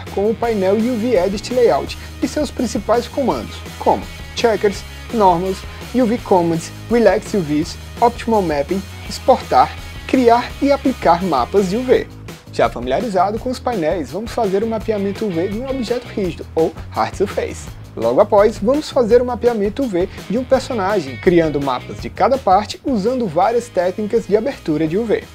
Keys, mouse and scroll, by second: 0.8 click, 1.1 click, 1.2 click, 1.3 click, 1.5 click, 1.8 click, 1.9 click, 2.1 click, 2.2 alt+click, 2.4 click, 2.5 alt+click, 2.9 click, 3.1 alt+click, 3.3 click, 3.8 click, 4.0 click, 4.9 ctrl+a, 4.9 click, 5.6 ctrl+s, 5.8 ctrl+z, 6.0 click, 6.4 click, 6.5 alt+click, 8.7 8, 9.0 Left, 10.9 click, 11.1 click, 14.8 click, 15.6 click, 16.1 alt+click, 16.3 ctrl+z, 16.4 click, 17.8 ctrl+c, 17.8 ctrl+v, 17.8 click, 18.3 ctrl+a, 18.7 alt+click, 19.4 click, 19.8 alt+click, 20.1 ctrl+s, 20.4 click, 21.0 alt+click, 21.2 click, 22.0 click, 22.8 6, 23.0 Tab, 23.0 Return, 23.0 6, 23.7-24.1 alt+drag, 24.2 Return, 24.2 6, 24.2 0, 24.3 click.